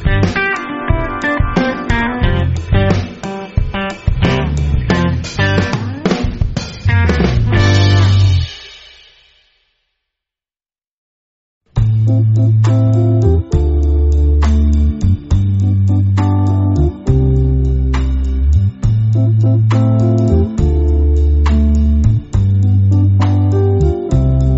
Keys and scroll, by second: 0.3 super+space, 0.4 super+space, 0.5 super+space, 0.6 super+space, 1.3 super+space, 1.8 alt+super+space, 1.9 alt+super+space, 2.4 super+space, 2.5 super+space, 2.8 super+space, 3.3 alt+space, 4.7 alt+super+space, 5.5 alt+super+space, 14.5 space, 15.0 super+space, 15.1 super+space, 16.7 space, 17.3 alt+super+space, 17.3 alt+super+space, 17.4 alt+super+space, 18.3 alt+super+space, 18.5 alt+super+space, 18.6-19.3 typing, 19.8 super+space, 19.9-20.4 super+space, 21.0 space, 21.5 alt+super+space, 21.6 alt+super+space, 21.8 alt+super+space, 22.3 alt+super+space, 23.9 alt+super+space, 24.0 alt+super+space.